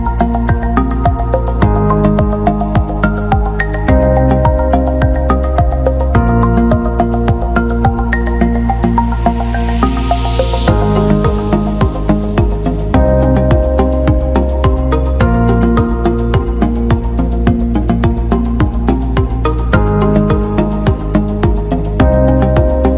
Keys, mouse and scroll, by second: 21.0 click, 21.3 Tab.